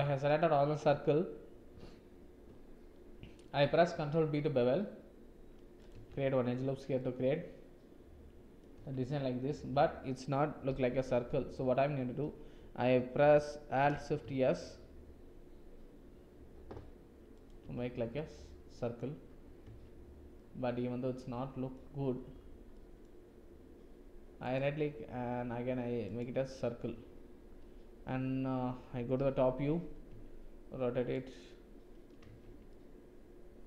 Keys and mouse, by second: 0.0 shift+z, 3.5 ctrl+b, 5.9 Tab, 6.9-8.7 drag, 8.8 Tab, 10.7 KP_7, 14.2 alt+shift+s, 17.6 Tab, 18.1 click, 19.6 Tab, 20.3-20.9 drag, 20.9-21.6 middle drag, 21.6 middle click, 22.7 middle click, 24.5-29.1 drag, 29.1 KP_7, 30.0 r, 32.2 Tab, 32.6-33.6 drag.